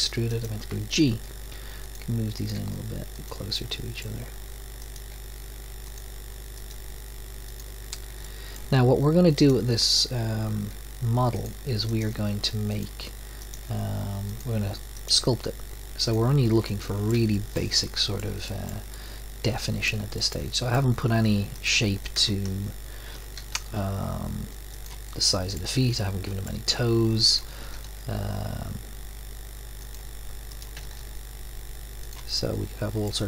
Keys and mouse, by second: 1.2 g, 2.6 g, 5.1-8.2 drag, 5.1 g, 6.8 g, 10.7 g, 12.1 g, 13.6 g, 15.2 g, 18.7-23.2 middle drag, 23.3 ctrl+a, 27.7 ctrl+a, 29.1-30.5 middle drag, 30.5-32.3 drag, 31.2 ctrl+a.